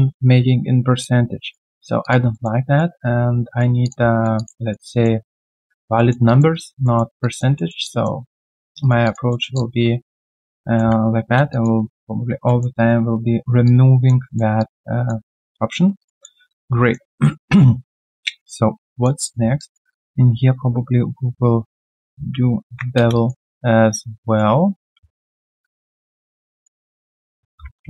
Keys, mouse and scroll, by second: 1.0 alt+click, 1.7 alt+right click, 2.0 alt+click, 2.3 alt+middle click, 2.6 alt+right click, 3.0 right click, 4.3 alt+click, 4.5 alt+right click, 4.9 alt+middle click, 5.2 alt+right click, 5.9 alt+middle click, 6.2 alt+click, 6.5 alt+right click, 6.8 alt+middle click, 7.2 alt+click, 7.5 alt+middle click, 7.8 alt+click, 8.2 alt+middle click, 8.5 alt+click, 8.8 alt+right click, 9.0 alt+click, 9.3 alt+middle click, 9.5 alt+click, 10.6 alt+middle click, 10.6 click, 12.4 alt+middle click, 12.7 alt+right click, 13.6 alt+click, 14.2 alt+middle click, 14.5 alt+click, 15.4 right click, 16.1 double click, 16.4 alt+click, 17.0 alt+middle click, 17.4 alt+click, 17.9-18.2 alt+scroll down 1, 18.2 alt+click, 19.2 alt+middle click, 19.5 alt+click, 21.9 alt+middle click, 23.1 alt+right click, 25.1 ctrl+a, 27.0 double click, 27.8 typing.